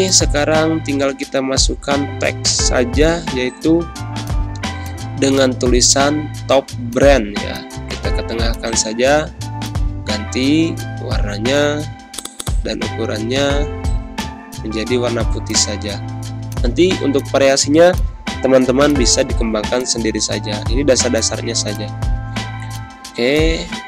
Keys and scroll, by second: 0.8-3.3 typing, 2.1 Return, 9.3 z, 9.8 space, 13.5 d, 19.4 g.